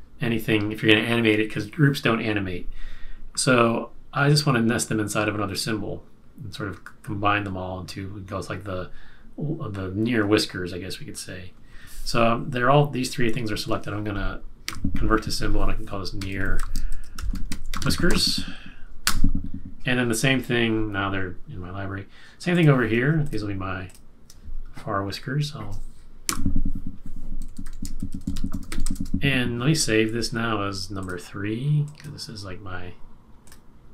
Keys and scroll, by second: 14.6 F8, 15.9-18.5 typing, 19.0 Return, 26.2 F8, 27.2-29.3 typing, 30.4 typing.